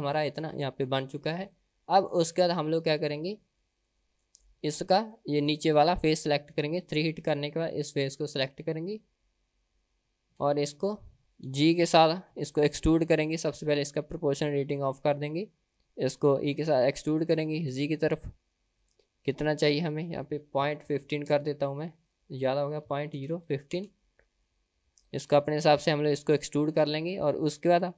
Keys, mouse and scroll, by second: 0.6 Tab, 1.2 click, 1.6-2.2 middle drag, 2.4 Tab, 2.8 middle click, 3.6 Tab, 4.0 middle click, 4.7 Tab, 5.2 middle click, 7.4 click, 8.4 click, 10.3 KP_1, 11.6 g, 14.8 click, 16.7 e, 20.0-25.2 drag, 27.0-27.9 scroll up 1.